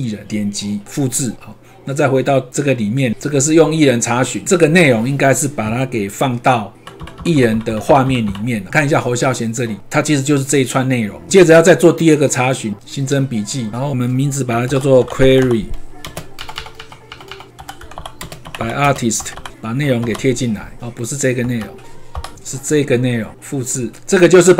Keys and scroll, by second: 6.7 shift+Down, 8.7 ctrl+c, 20.0 ctrl+v, 21.6 ctrl+a.